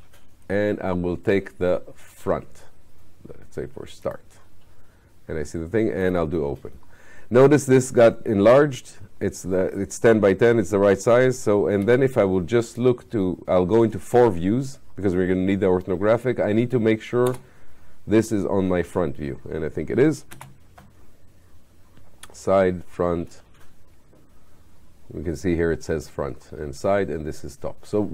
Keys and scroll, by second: 20.3 space.